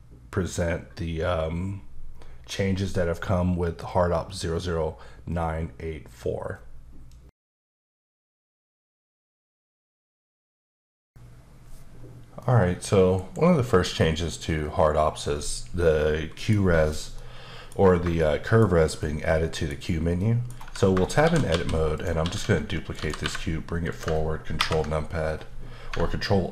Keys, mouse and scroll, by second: 13.2 KP_Decimal, 13.6-13.9 scroll down 2, 13.9 middle click, 17.2 middle click, 18.2 shift+middle click, 20.2 middle click, 20.6 Tab, 21.2 shift+d, 21.9 click, 22.2 s, 23.2 typing, 23.9 click, 24.6 ctrl+KP_Subtract.